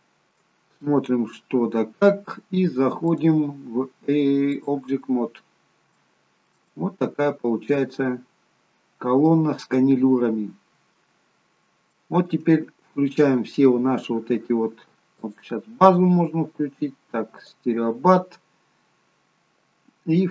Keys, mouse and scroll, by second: 0.7-1.5 scroll down 1, 1.5 middle click, 1.5-2.8 scroll down 2, 3.1 click, 5.5-6.0 scroll up 3, 6.0 shift+middle click, 6.8 middle click, 8.3-9.0 scroll up 4, 9.0-9.4 scroll down 1, 9.4 middle click, 9.4-10.3 scroll down 1, 11.2-12.1 scroll down 5, 12.1 shift+middle click, 15.3 click, 17.5 click.